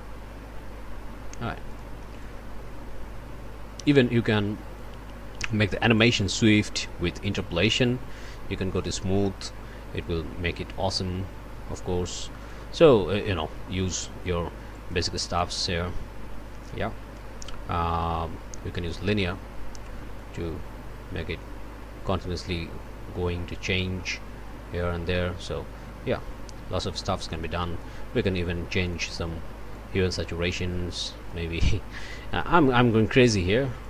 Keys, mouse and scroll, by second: 1.7 click, 2.2-5.0 drag, 6.0 right click, 8.8 click, 12.4 click, 14.7 right click, 18.9 click, 20.2-28.0 drag, 28.7 click, 29.7-31.5 drag, 32.0 click, 33.3 click.